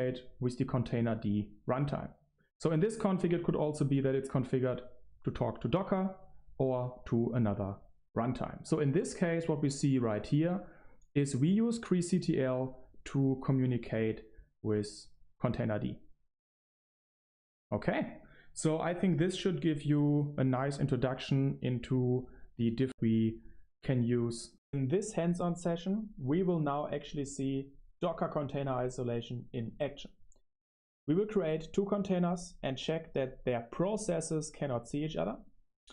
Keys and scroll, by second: 22.8 Right, 24.4 Right.